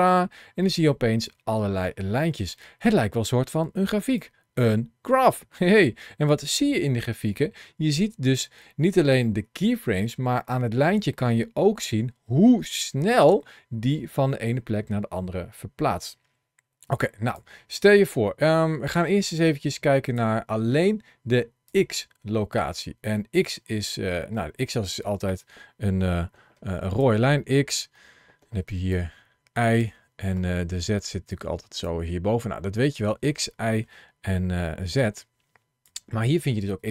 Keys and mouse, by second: 0.5-1.8 middle drag, 2.4 middle click, 4.0-16.9 drag, 17.2 click, 19.9 click, 21.6 click, 24.2 middle click, 26.2 ctrl+shift+l, 33.2 middle click, 34.5 ctrl+shift+a, 34.8 shift+c.